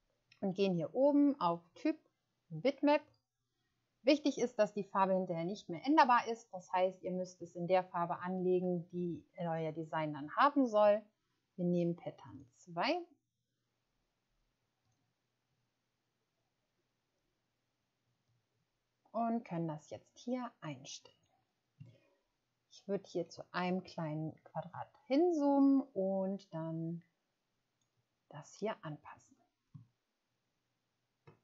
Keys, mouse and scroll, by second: 12.2 click, 22.3-23.1 ctrl+scroll up 2, 29.8 ctrl+scroll down 1.